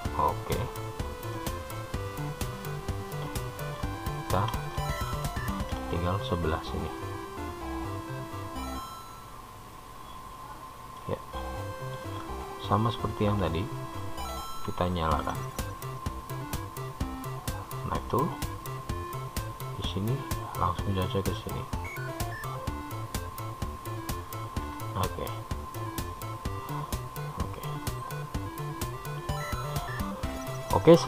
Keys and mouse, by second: 1.5-4.0 middle drag, 5.0-6.0 shift+middle drag, 7.0 click, 8.3-10.2 drag, 11.6-12.8 middle drag, 15.8 k, 26.1-30.2 middle drag.